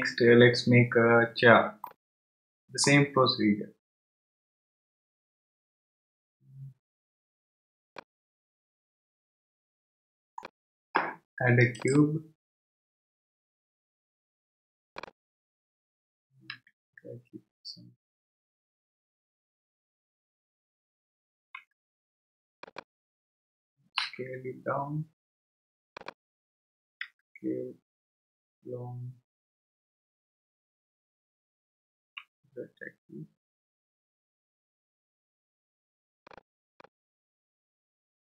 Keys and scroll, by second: 16.5 g, 21.6 x, 24.0 s, 27.0 s, 32.0 z.